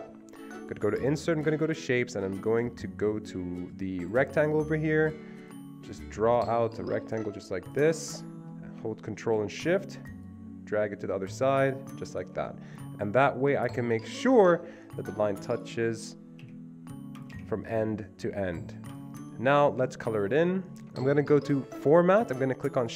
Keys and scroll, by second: 16.4 Delete, 17.3 Delete.